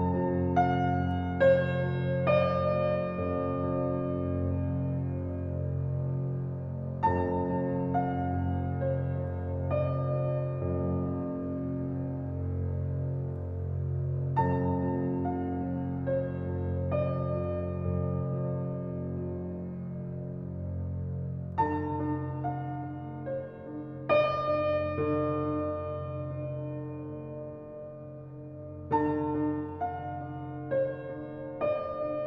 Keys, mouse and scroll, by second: 2.2 scroll up 4, 2.9 drag, 3.2-5.2 scroll down 1, 5.2 click, 5.9 g, 7.5 scroll up 4, 7.9-8.9 shift+middle drag, 8.9-11.8 scroll down 2, 12.0 a, 12.7 ctrl+click, 14.0 s, 18.4 click, 21.7-22.8 drag, 26.8-28.6 drag, 30.5 g.